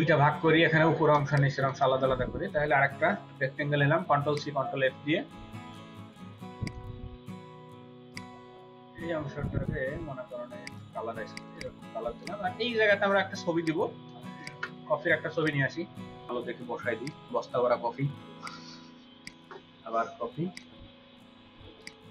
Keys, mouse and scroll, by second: 1.2-1.8 space, 3.0 ctrl+c, 3.4 ctrl+f, 11.4 double click, 16.2-17.8 scroll down 6, 18.4 right click.